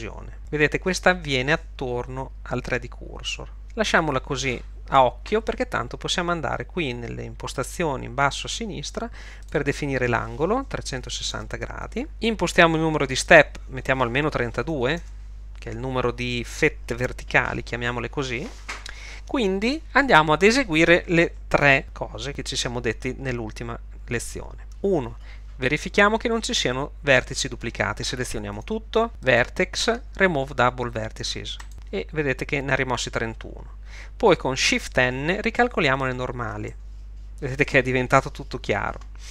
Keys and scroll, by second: 11.1 3, 11.3 6, 11.4 0, 14.7 3, 15.0 Home, 28.6 a, 36.4 shift+n.